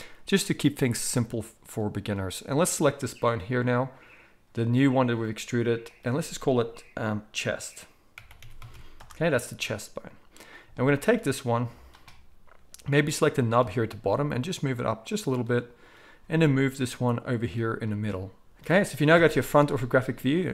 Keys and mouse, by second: 2.0-5.9 middle drag, 5.9-10.4 drag, 10.4-13.3 shift+middle drag, 13.3-15.4 drag, 13.8 g, 15.4-20.5 middle drag, 16.2 g, 19.1 KP_1.